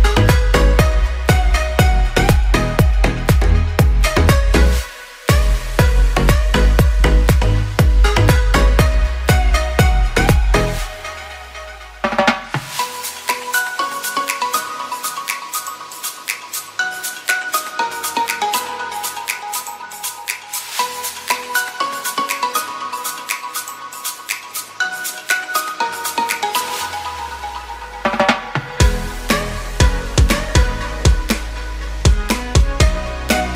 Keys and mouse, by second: 0.5 Tab, 1.4 shift+drag, 1.7 Tab, 2.2-6.8 typing, 7.9 KP_Decimal, 8.8 click, 10.3 3, 11.3-13.9 drag, 14.3 ctrl+b, 18.2-20.8 drag, 22.2 click, 23.0 ctrl+b, 25.9-26.2 drag, 26.3 Tab, 26.5-28.8 drag, 28.9 Tab, 30.4 KP_3, 31.3 Tab, 31.9 z, 33.2 z.